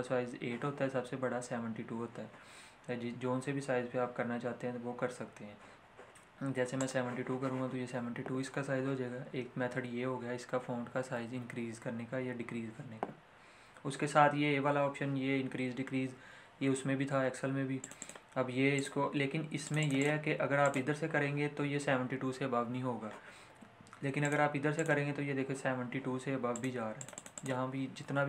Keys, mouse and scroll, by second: 6.7 click, 17.8 click, 24.2 click.